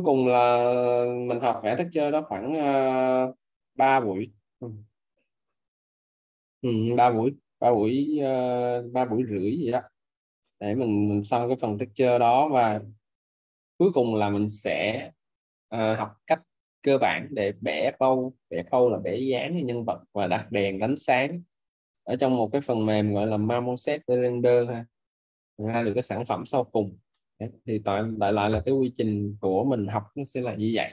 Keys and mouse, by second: 5.2 alt+middle click, 11.6 alt+click, 15.0 alt+middle click, 22.5 alt+click, 25.6 alt+middle click, 28.3 alt+right click, 28.8 alt+middle click.